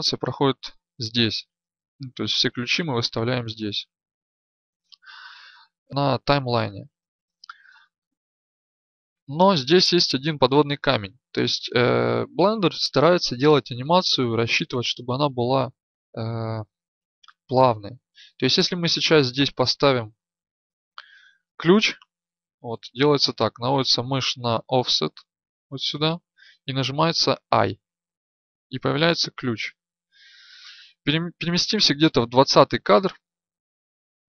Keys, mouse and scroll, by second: 31.9-32.3 Right, 32.6 Right, 32.9 Right, 33.8 Left.